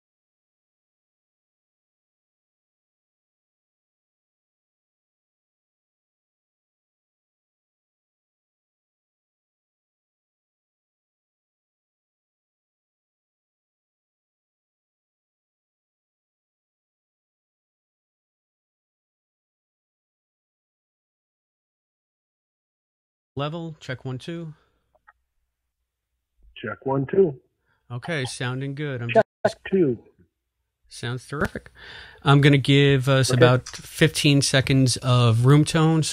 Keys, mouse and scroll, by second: 14.4 \, 16.8-19.5 drag, 22.1 click, 22.3 click, 23.3 space, 24.4 click, 25.4 click, 29.0 click, 30.3 click, 31.0 click, 32.7 click.